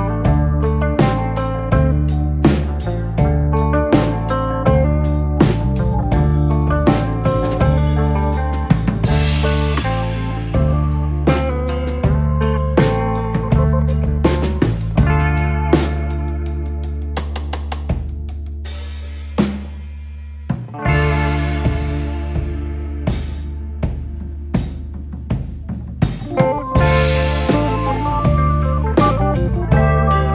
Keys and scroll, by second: 0.0-0.7 typing, 4.1-4.9 typing, 21.5-21.8 typing, 26.1 m, 29.4-30.3 typing.